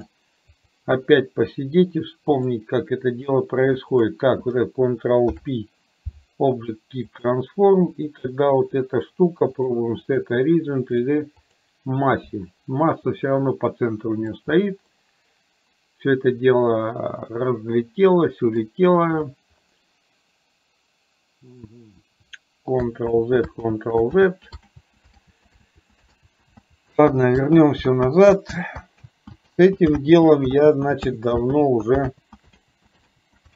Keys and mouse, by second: 0.1 click, 2.4 click, 3.8 shift+click, 5.3 ctrl+p, 8.0 click, 9.6-11.6 drag, 13.4 middle click, 15.0-18.6 middle drag, 23.1 ctrl+z, 23.8 ctrl+z, 24.3 ctrl+z, 25.4 ctrl+z, 25.6 ctrl+z, 26.3 ctrl+z, 26.6 ctrl+z, 27.3 ctrl+z, 27.8 ctrl+z, 28.1 ctrl+z, 29.1 ctrl+z, 29.8 ctrl+z, 30.1 ctrl+z, 30.8 ctrl+z, 31.3 ctrl+z, 31.6 ctrl+z, 32.3 ctrl+z, 32.8 ctrl+z, 33.4 ctrl+z.